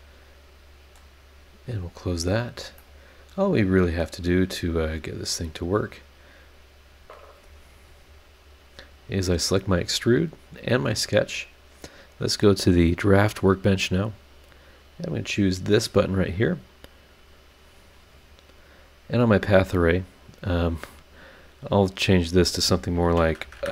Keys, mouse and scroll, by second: 1.6 click, 2.2-2.7 scroll down 4, 2.8-4.0 middle drag, 4.0 scroll up 1, 4.1-4.7 scroll down 1, 4.8-5.5 scroll down 3, 5.6-6.2 scroll up 4, 6.4 scroll down 1, 6.9 scroll up 2, 7.5 scroll up 2, 8.6 click, 10.5 ctrl+click, 12.1 click, 13.6 click, 17.1 click, 21.8 click, 23.0 KP_1, 23.2 KP_0.